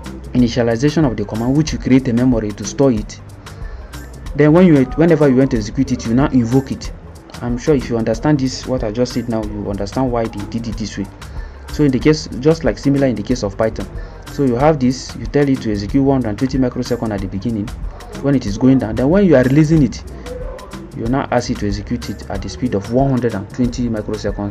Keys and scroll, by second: 14.0 Escape.